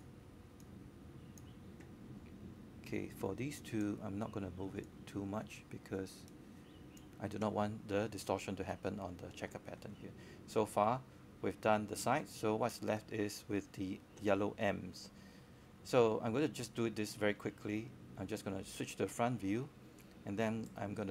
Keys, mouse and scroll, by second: 9.1 click, 9.3-11.2 right drag, 12.0-13.2 drag, 15.4 w, 16.0-21.1 drag.